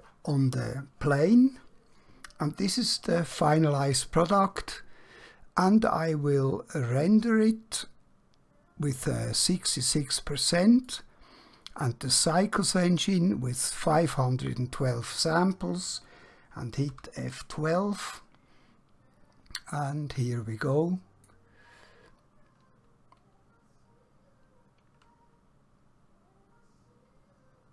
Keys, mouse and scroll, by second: 11.0 click, 17.0 F12, 19.8 F12, 20.7 click.